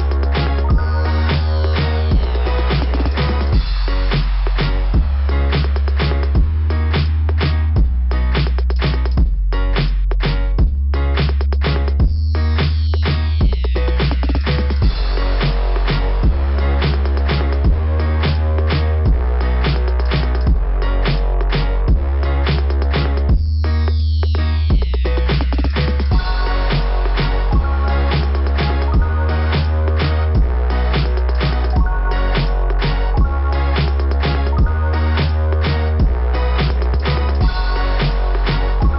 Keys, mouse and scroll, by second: 2.7 click, 2.8 ], 2.9 click, 10.5 click, 11.1 click, 11.2 click, 11.4 click, 11.5 click, 11.7 click, 14.1 click, 14.5 click, 14.6 click, 14.7 click, 14.9 click, 15.0 click, 17.7 click, 17.8 click, 18.0 click, 18.0 click, 18.3 click, 18.4 click, 18.5 click, 18.6 click, 23.2 scroll down 2, 24.9 scroll down 1, 25.4-26.2 typing, 25.5 scroll down 1, 27.4 scroll down 3, 27.4 typing, 28.7 typing, 30.3 click, 30.7 click, 33.4 click, 33.7 click, 33.8 click, 34.0 click, 35.2 click, 35.3 click, 35.9 click, 36.1 click, 36.4 click, 36.5 double click, 37.9 click.